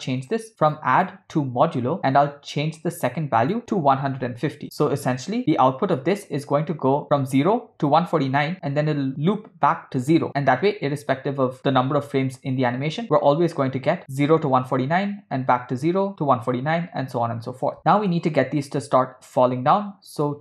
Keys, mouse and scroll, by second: 1.0-2.0 drag, 3.4-4.6 drag, 17.8 middle click, 20.3 click.